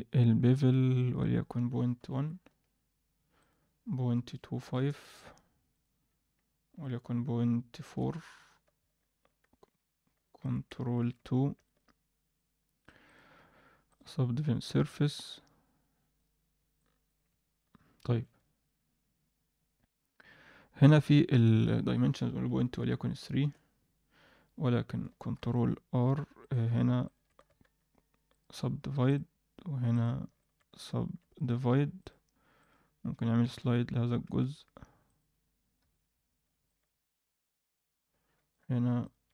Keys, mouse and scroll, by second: 1.1-2.5 drag, 3.4-4.7 drag, 5.7-7.9 drag, 9.4 ctrl+KP_3, 10.2 middle drag, 10.9 ctrl+KP_2, 11.6 middle click, 12.3 drag, 12.7 click, 13.0-13.9 drag, 16.1 click, 16.7 alt+middle drag, 18.1 Tab, 19.2 shift+middle click, 19.9 click, 20.3-20.8 scroll down 1, 21.2 scroll down 3, 21.5-23.4 drag, 25.3 ctrl+r, 26.4 click, 27.0 shift+click, 27.6 ctrl+w, 28.3-29.4 right drag, 29.9 click, 30.4 shift+click, 31.3-32.6 right drag, 32.6 click, 33.4 g, 35.0 click, 35.7 KP_7, 36.3 scroll up 1, 36.6 shift+middle click, 36.9-38.1 scroll up 1, 38.5 click, 39.0 shift+click.